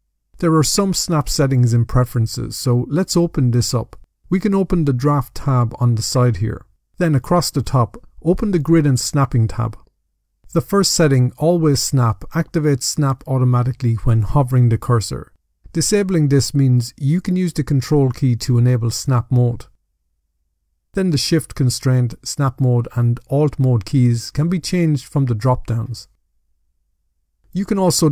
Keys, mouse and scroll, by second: 2.0 click, 3.3 click, 6.0 click, 7.6 click, 23.8 click, 24.5 click, 25.1 click, 25.6 click, 26.3 click, 26.6 click.